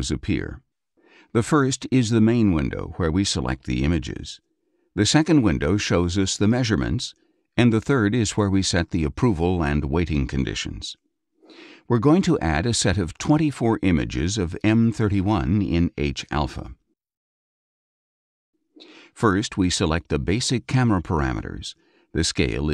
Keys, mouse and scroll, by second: 5.0 click, 7.8 click, 12.1 click, 13.7 click, 15.2 ctrl+a, 17.4 click, 20.1-20.8 scroll up 2, 20.8 click, 21.7 KP_2.